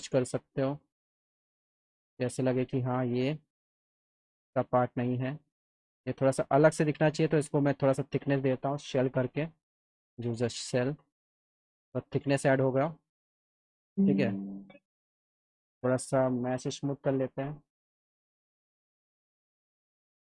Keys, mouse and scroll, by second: 0.0 click, 1.1-2.4 drag, 4.7 click, 5.6 click, 6.8 click, 8.1 click, 8.8 s, 9.2 s, 10.1 s, 10.6 click, 11.8 alt+middle click, 15.7 click, 17.9 m, 19.1 click.